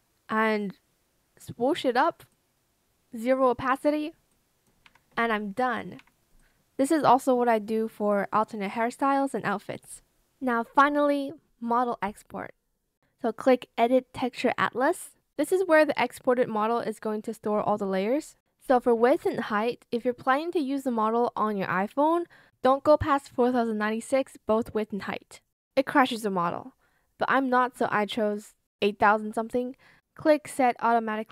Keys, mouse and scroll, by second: 4.7 Escape.